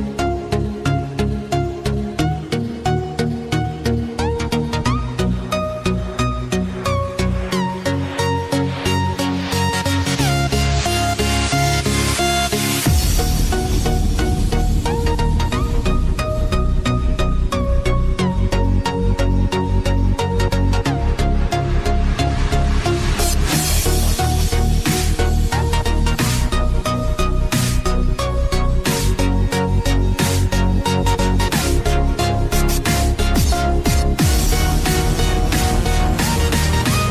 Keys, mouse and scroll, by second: 0.2 scroll down 1, 0.5 scroll up 1, 0.8-2.0 typing, 1.5 click, 2.2 click, 2.9-3.2 scroll down 1, 3.2-3.6 scroll up 1, 4.1 click, 9.0 click, 9.4 right click, 11.1 click, 15.9 scroll up 1, 16.4 [, 16.9 click, 18.6 ctrl+z, 19.6 click, 20.6 right click, 21.4 click, 22.7 right click, 25.2 click, 25.9-26.5 scroll up 1, 26.5 typing, 27.3 click, 28.2 ], 29.3 ctrl+z, 30.6 click, 33.3 KP_2, 33.7 KP_0, 34.1 Return, 34.8-35.2 scroll down 1, 35.2-35.5 scroll up 1, 35.5 [, 35.8 click.